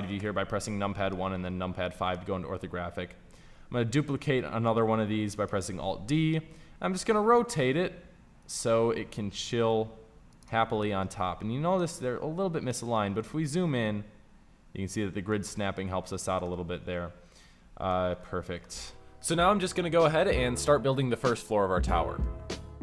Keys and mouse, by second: 0.1 KP_5, 3.3 alt+d, 5.4-6.7 drag, 6.7 r, 9.0 g, 13.6 g, 21.2 z.